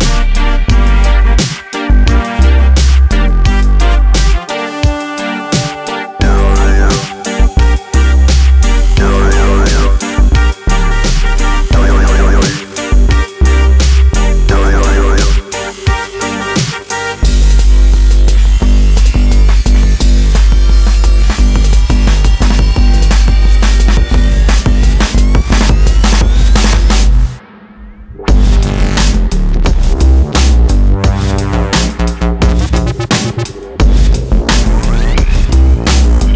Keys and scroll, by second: 15.3 Tab, 24.3 ctrl+e, 30.0 Escape.